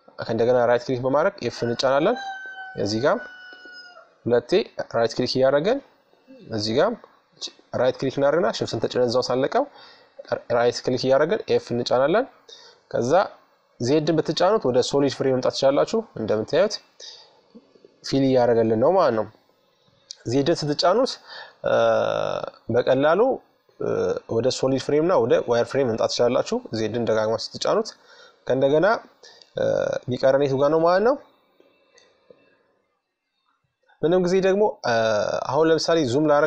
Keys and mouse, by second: 1.4-3.8 right drag, 3.0 f, 6.0-7.9 right drag, 8.8-10.7 right drag, 9.9 f, 11.8 z, 13.0 middle click, 16.3 middle click, 23.4-25.3 typing, 27.9-30.8 middle drag, 32.2-33.9 drag, 35.1-36.4 middle drag.